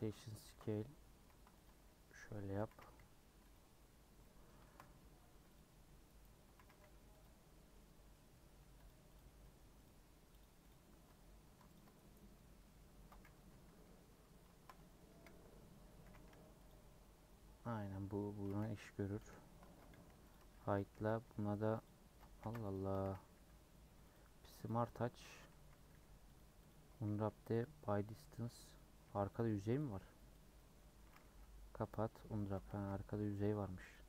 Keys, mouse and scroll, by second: 0.0 Tab, 0.5 ctrl+b, 1.7 Tab, 2.0 middle click, 2.4 Tab, 2.7 a, 3.5 u, 4.2 middle click, 4.8 scroll up 2, 5.5 click, 6.5 a, 7.2 u, 7.5-8.6 middle drag, 8.6 Tab, 8.8 click, 9.1 click, 9.4 middle click, 9.8 click, 10.4 click, 10.7 click, 10.9 Tab, 11.2 scroll up 1, 11.4 2, 12.3-13.5 middle drag, 13.5 /, 13.8 /, 15.1 KP_Decimal, 16.0 a, 16.7 u, 18.3 Tab, 19.2 /, 19.9 m, 20.3 click, 20.6 Tab, 20.8 scroll up 1, 20.9 a, 21.8 u, 22.0 Tab, 22.7 ctrl+a, 22.8 Tab, 24.7 u, 25.5 a, 26.7 u, 28.7 middle click, 29.0 3, 29.4 Left, 29.8 click, 30.3 x, 30.5 middle click, 31.0 a, 31.9 u, 32.3 Tab, 32.7 h, 33.9-34.0 Left.